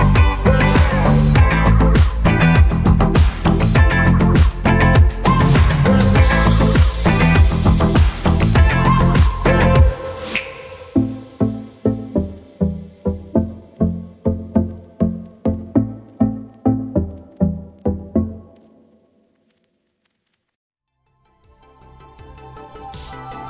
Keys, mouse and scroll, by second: 0.5 click, 0.9 i, 2.4 click, 2.8 a, 3.1 click, 5.2 i, 6.0 click, 6.2 a, 6.5 click, 7.7 i, 9.3 click, 9.5 a, 9.8 click, 11.0 i, 12.3 click, 12.5 a, 12.7 click, 14.4 i, 15.3 click, 15.5 a, 15.7 click, 17.7 i, 18.8 click, 19.0 a, 19.5 click, 21.0 alt+scroll down 1, 22.5 click.